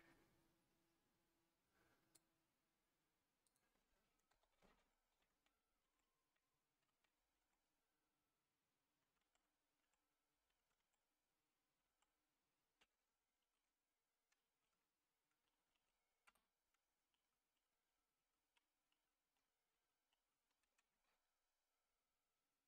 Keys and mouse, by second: 3.4-16.3 drag, 17.2 ctrl+z, 17.5 ctrl+z, 18.2 ctrl+z, 18.9 ctrl+z, 19.4 ctrl+z, 19.7 ctrl+z, 20.1 ctrl+z.